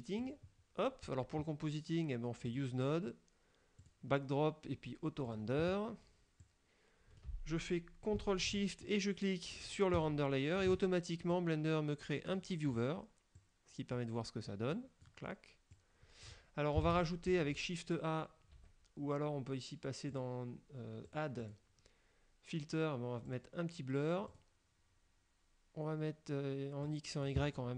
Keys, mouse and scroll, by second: 0.3 click, 0.9 scroll down 1, 2.6 click, 3.9 click, 5.3 click, 6.5 click, 10.1 ctrl+shift+click, 11.4-13.0 drag, 13.5 click, 14.8 click, 15.8 click, 17.0 shift+a, 18.6 Escape, 20.3 click, 21.2 click, 21.6 click, 23.3 click, 24.4 click, 26.9 click.